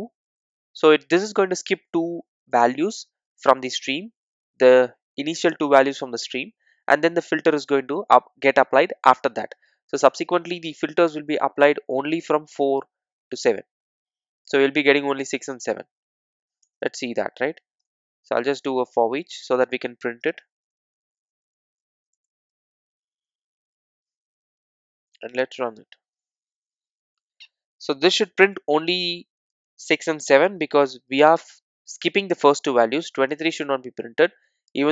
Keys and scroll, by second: 18.8 Return, 22.1 Return, 22.1 Tab, 25.6 super+r.